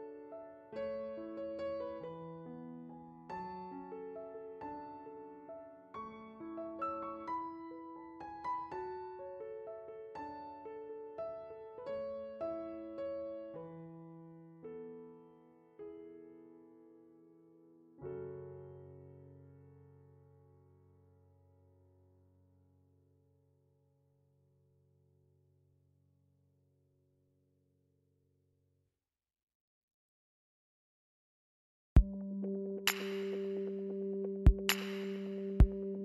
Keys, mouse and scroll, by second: 0.6 middle click, 4.8 click, 13.6 middle click, 14.5 click, 15.1 click, 17.7 click, 20.6 click, 30.9 click.